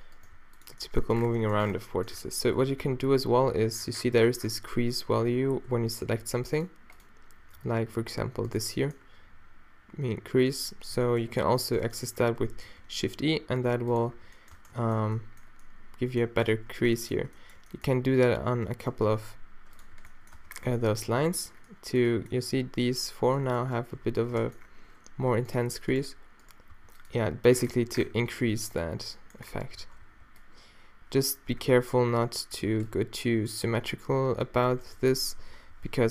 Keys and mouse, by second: 1.1 Tab, 1.1 g, 1.4 click, 2.2 Tab, 2.8 n, 10.8 z, 11.4 z, 12.7 shift+e, 14.2 z, 14.6 Tab, 15.1 z, 15.3 click, 15.9 middle click, 16.5 Tab, 19.1 shift+e, 20.0 z, 20.4 Tab, 20.6 z, 24.1 Tab, 26.8 r, 27.2 g, 28.5 r, 28.8 r, 28.8 g, 29.8 a, 30.1 b, 30.3 click, 31.5 z, 32.6 b, 34.7 shift+e, 35.8 z.